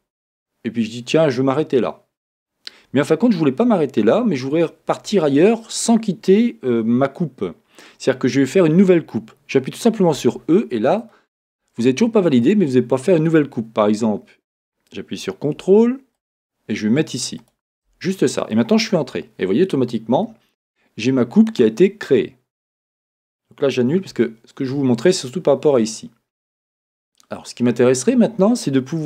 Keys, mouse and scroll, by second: 19.1 Return, 24.1 z.